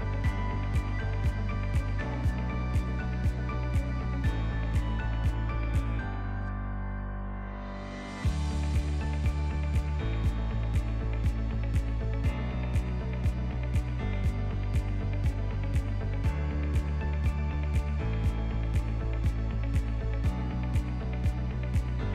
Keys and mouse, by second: 2.2-4.2 drag, 4.9 s, 7.4 click, 8.5 click, 9.7 click, 10.8 click, 13.1-14.3 drag, 16.3-16.9 drag, 18.8 click, 21.3-22.1 shift+drag.